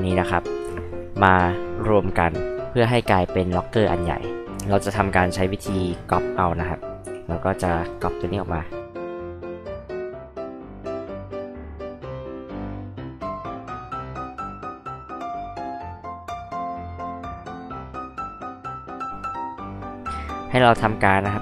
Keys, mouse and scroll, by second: 5.7 click, 7.0 m, 7.8 ctrl+click, 9.7 ctrl+click, 10.3 ctrl+click, 11.4 click, 11.6-14.1 typing, 11.8 click, 12.2 ctrl+click, 12.5 ctrl+click, 12.8 click, 13.2 ctrl+click, 13.5 ctrl+click, 13.8 click, 14.2 ctrl+click, 14.6 ctrl+click, 14.8 ctrl+click, 15.0 ctrl+click, 15.2 space, 15.3 click, 15.9 ctrl+click, 16.3 ctrl+click, 17.0 click, 17.1 click, 17.4 space, 17.4 click, 17.5 m, 17.7 ctrl+click, 18.2 space, 18.6 click, 19.0 click, 19.3 click.